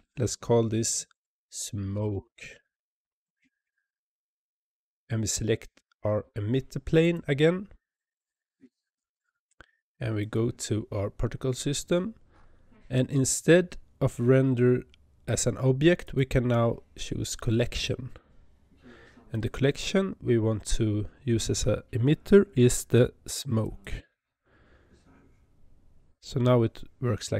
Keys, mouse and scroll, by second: 6.9 click, 10.1 click, 11.8-12.4 scroll down 15, 13.1-13.6 scroll down 3, 15.9-18.9 drag, 19.2-22.2 drag.